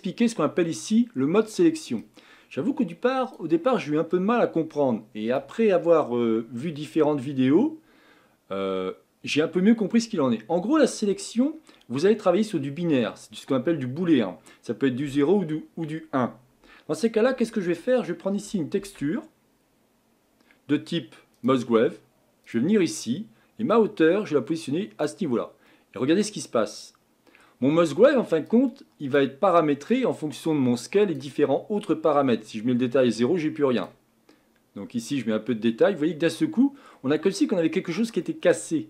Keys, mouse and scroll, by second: 21.4 shift+a, 25.1 click, 25.7-30.1 middle drag, 30.1-36.0 drag, 36.0-37.2 middle drag, 37.2-37.9 scroll up 4, 38.2-38.8 middle drag.